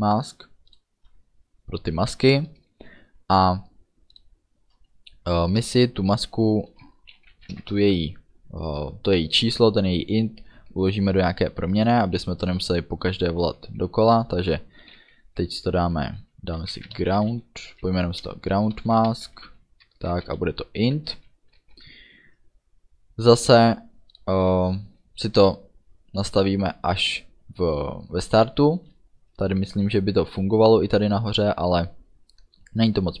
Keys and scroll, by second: 5.7 Return, 7.3 i, 7.4 n, 7.6 t, 7.7 space, 16.7 g, 16.8 r, 16.9 o, 18.8-21.2 typing, 21.6 ctrl+s, 28.5 Return.